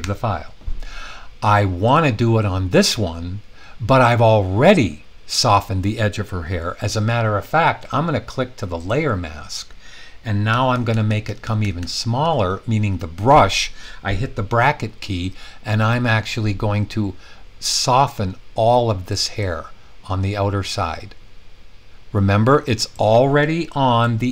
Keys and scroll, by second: 10.4-12.2 typing.